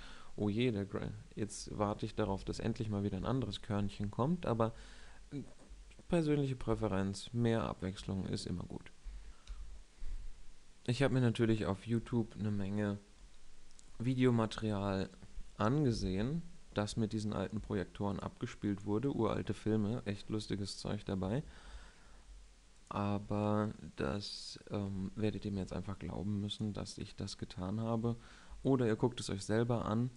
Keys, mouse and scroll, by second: 15.6 KP_7, 17.2-20.6 middle drag, 21.6 shift+a, 25.7 s, 26.7-27.8 drag, 27.8-28.5 middle drag, 28.6-30.1 middle drag.